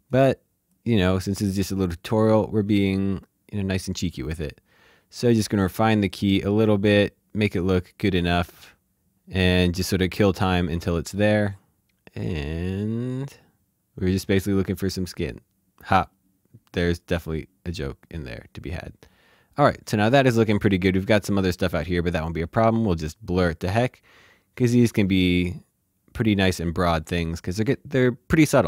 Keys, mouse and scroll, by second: 5.2 click, 13.1 click, 17.7 click, 23.1 click.